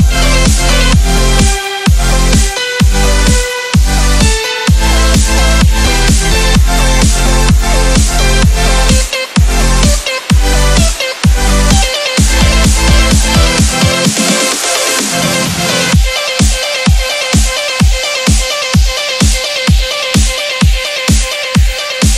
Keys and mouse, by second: 1.4 Right, 2.7-5.2 drag, 5.2 Down, 5.8-9.0 drag, 9.3 space, 9.5 click, 9.5 space, 11.2 click, 12.5 shift+l, 13.8-18.8 typing, 19.6 click, 20.1 space, 20.3 click, 20.4 space, 20.7 click, 20.8 space, 21.3 click.